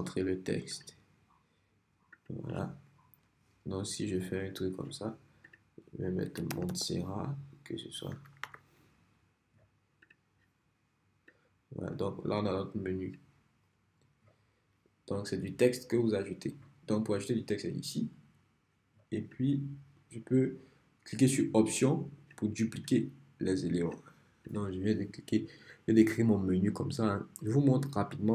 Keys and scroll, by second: 6.0-7.2 typing, 8.5 t.